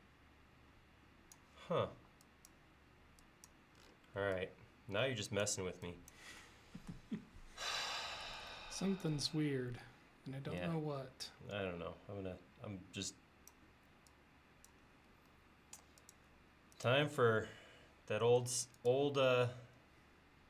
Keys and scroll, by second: 2.0 e, 15.1 l.